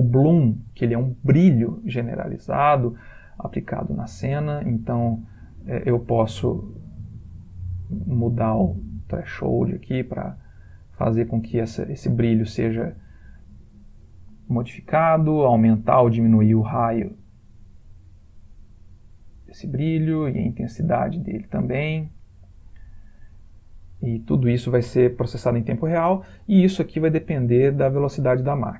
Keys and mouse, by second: 3.3 click, 6.2 ", 6.5 Escape, 7.0 click, 14.9 click, 21.9 click.